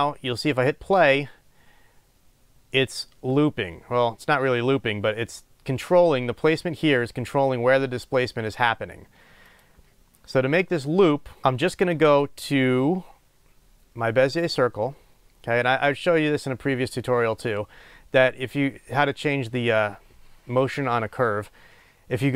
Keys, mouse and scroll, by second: 9.8 click, 11.2 scroll down 1, 11.4-14.3 middle drag, 14.3 click.